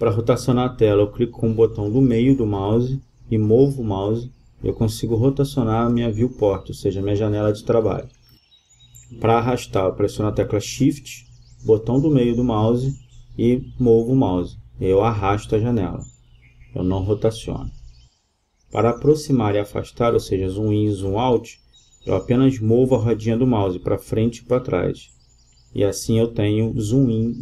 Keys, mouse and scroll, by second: 1.4-3.3 middle drag, 4.8 middle click, 5.0 middle click, 9.9 middle click, 10.0 middle click, 11.0 middle click, 11.0 click, 11.2 middle click, 11.2 drag, 11.6 middle click, 11.8 middle click, 12.0 middle drag, 12.3-13.8 middle drag, 20.2 middle click.